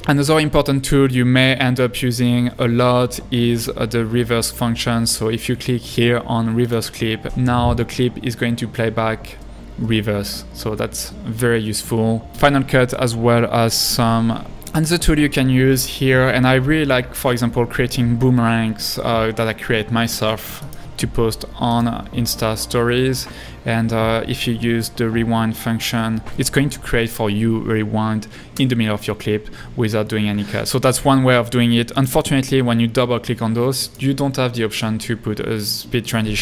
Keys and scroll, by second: 14.4 Right, 28.6 space.